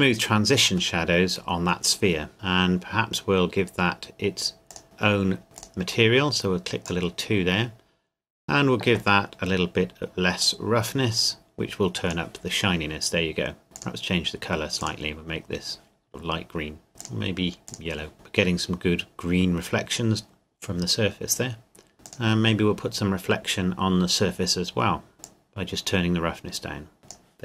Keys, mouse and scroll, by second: 1.0 middle click, 4.7 click, 5.6 click, 7.9 scroll down 1, 10.4 click, 17.0 click, 22.0 click, 25.2 click.